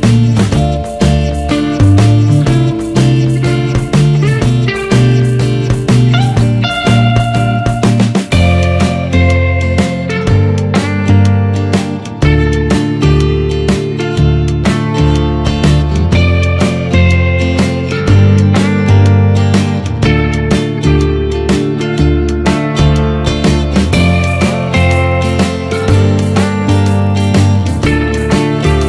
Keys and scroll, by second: 1.4 ctrl+z, 12.1 ctrl+z, 14.6 Return.